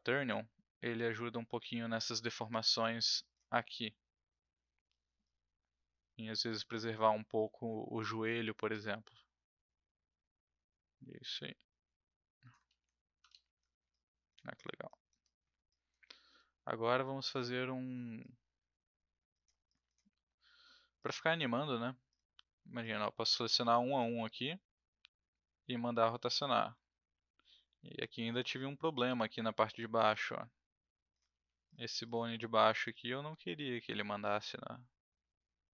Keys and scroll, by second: 12.6 ctrl+z, 13.3 ctrl+z, 16.3 w, 23.6 e, 31.3 ctrl+z.